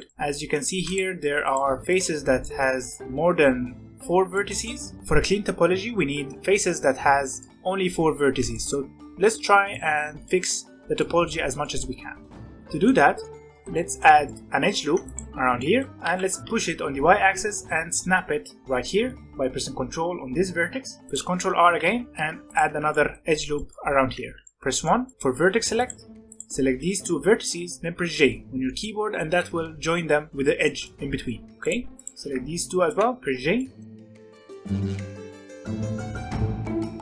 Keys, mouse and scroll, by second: 0.7 3, 0.9 click, 1.3 click, 1.9 click, 2.4-5.6 shift+middle drag, 7.4-12.6 shift+middle drag, 12.6 scroll down 1, 12.8-14.6 shift+middle drag, 14.6 ctrl+r, 15.5 middle click, 15.9 g, 18.8-21.0 middle drag, 21.0 ctrl+r, 21.6 g, 22.9 shift+middle click, 23.7 scroll up 1, 24.0 1, 24.4 shift+middle click, 25.2 alt+a, 25.7 click, 26.2 shift+click, 28.1 j, 28.4 scroll up 2, 28.6 middle click, 29.2 alt+a, 30.6 shift+middle click, 31.5 click, 31.9 shift+click, 32.9 j, 33.3 scroll down 4, 33.6 middle click, 33.8 alt+a, 33.9 click, 34.2 shift+click, 34.7 j, 35.0 middle click, 35.3 ctrl+r, 36.1 g, 36.8 middle click, 36.9 ctrl+r.